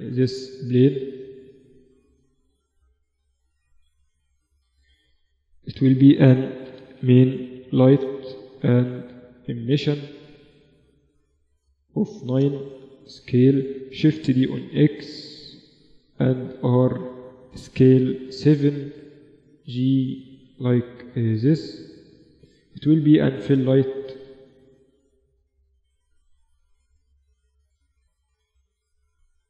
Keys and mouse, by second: 1.0 KP_1, 1.9-3.8 drag, 3.3 r, 4.6-6.9 drag, 8.4-10.2 drag, 10.7-12.4 drag, 12.4 s, 13.7 shift+d, 15.5 r, 17.0 s, 18.6-20.3 middle drag, 18.7 g, 21.2-25.4 drag, 26.8 s, 27.9 KP_7, 28.5 KP_1, 29.2 KP_3.